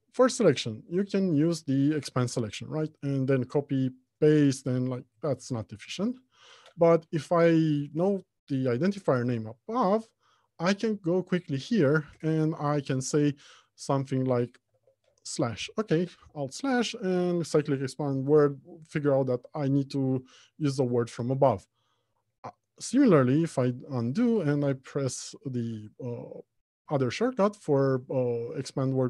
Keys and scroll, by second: 1.5 ctrl+w, 3.4 ctrl+c, 5.1 ctrl+v, 5.6 ctrl+z, 14.9 alt+/, 23.3 ctrl+z, 25.0 alt+shift+/.